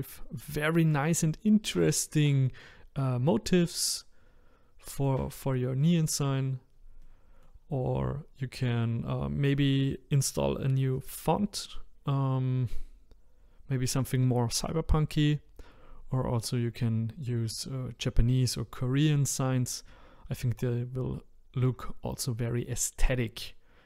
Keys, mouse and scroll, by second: 0.1-0.6 scroll down 1, 0.6-3.7 shift+middle drag, 3.7 click, 5.0 click, 5.4-5.8 scroll up 1, 5.8 middle click, 6.4-7.0 scroll down 1, 7.0-23.8 middle drag.